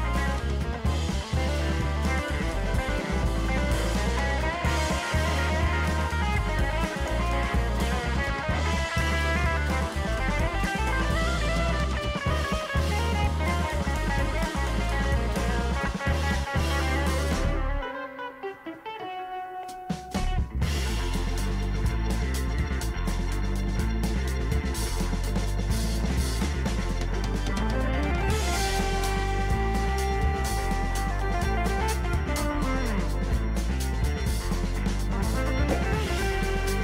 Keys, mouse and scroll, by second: 1.7-2.6 typing, 12.8 ctrl+t, 13.6 alt+shift+click, 19.5 ctrl+click, 29.3 ctrl+click.